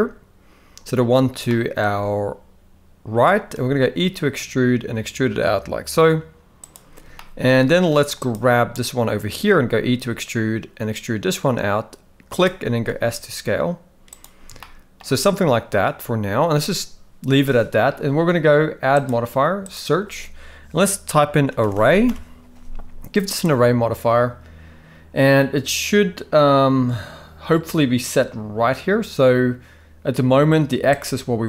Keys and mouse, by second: 1.5 shift+middle click, 3.6 e, 7.1-7.5 shift+middle drag, 8.2 click, 9.5 e, 12.7 s, 14.6-15.0 shift+middle drag, 19.1-23.4 drag, 21.7 r, 31.0-31.4 shift+drag.